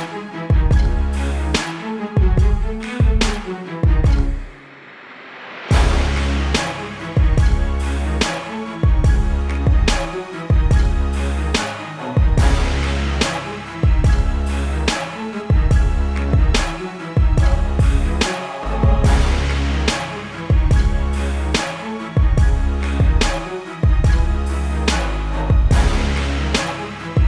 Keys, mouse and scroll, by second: 1.0 KP_5, 1.3 Tab, 5.0 click.